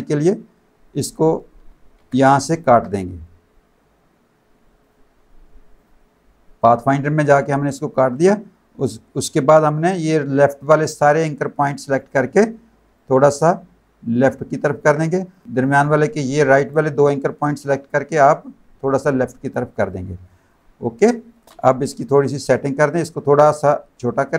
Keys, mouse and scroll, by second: 2.5 shift+click, 4.8 click, 5.7 click, 6.7 click, 8.8 click, 12.9 click, 15.3 click, 18.2 click, 20.3 alt+click, 21.0 space, 21.1 click, 21.8 v, 22.5 click, 23.9 shift+click.